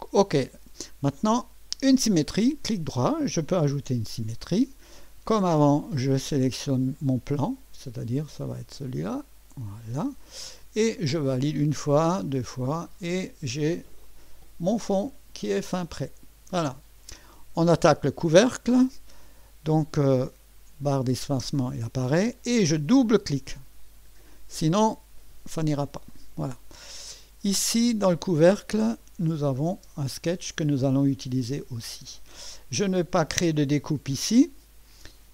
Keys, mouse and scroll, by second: 2.2 right click, 3.9 click, 5.6 click, 7.0 click, 9.3 click, 11.3 click, 12.3 click, 14.1-17.3 drag, 19.2 click, 21.3 space, 23.6 click, 23.8 click, 27.7 click, 29.0 click, 29.7 space, 31.0-32.4 drag.